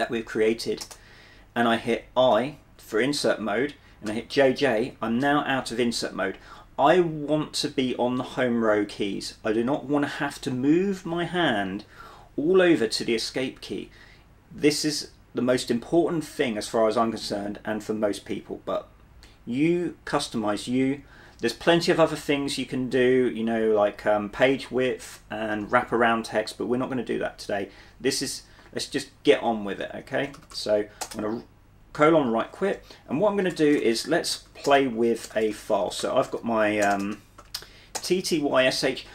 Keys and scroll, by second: 0.9 Return, 3.9-4.7 typing, 30.0-31.1 typing, 31.1 Return, 33.2-36.5 typing, 34.8 Return, 37.5-38.6 typing.